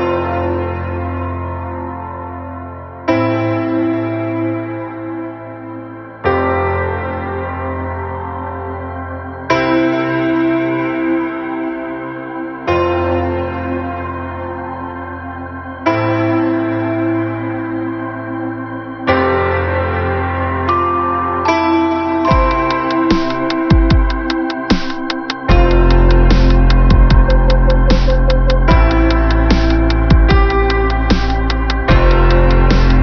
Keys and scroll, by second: 3.4 ctrl+alt+shift+n, 18.1 ctrl+-.